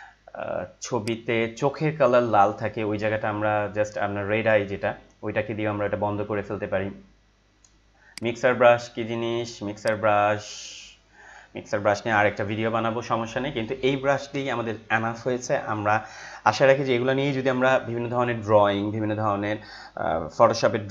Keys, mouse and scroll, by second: 1.0 right click, 8.1-12.2 drag, 12.1 ctrl+z.